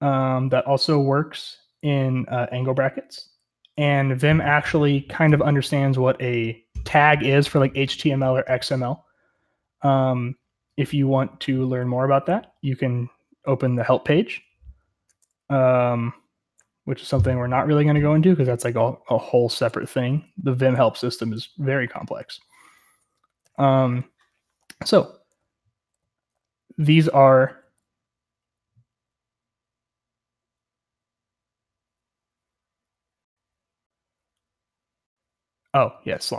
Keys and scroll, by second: 19.6-22.6 typing, 24.4 typing, 25.8 typing, 27.5 typing, 29.0 typing.